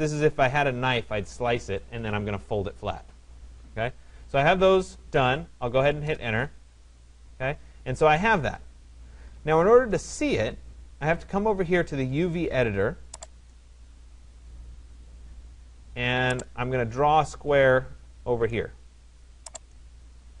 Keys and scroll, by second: 5.5 Return.